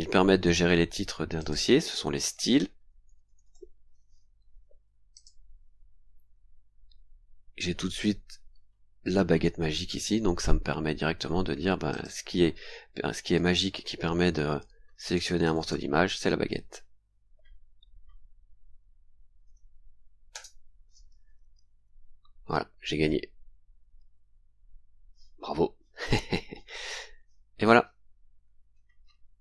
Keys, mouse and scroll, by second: 1.4 click, 1.9-3.9 typing, 4.3 scroll up 2, 5.1 click, 7.1 scroll up 2, 7.4 scroll down 2, 8.0 scroll down 2, 9.9-10.2 scroll up 2, 10.5 scroll up 2, 11.9 click, 13.3-16.2 typing, 18.7 scroll down 2, 20.3 Return, 23.3-24.2 scroll down 4, 28.5-29.0 scroll up 2.